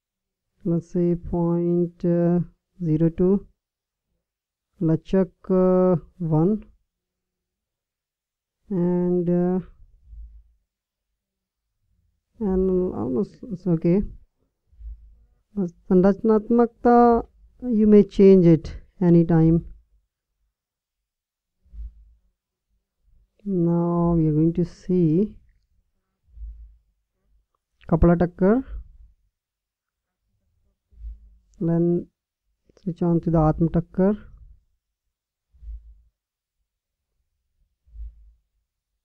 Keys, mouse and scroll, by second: 3.5-4.5 drag, 32.0-35.0 drag, 35.4-37.4 drag.